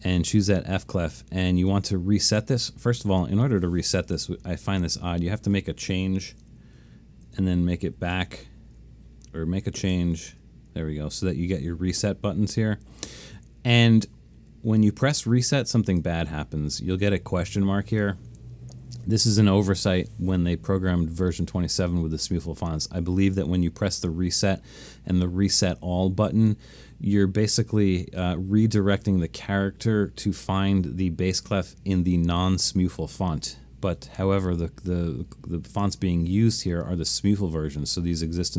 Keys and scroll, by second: 6.4 BackSpace, 6.8 1, 7.3 BackSpace, 7.7 2, 8.2 Tab, 10.0 1, 10.3 Tab.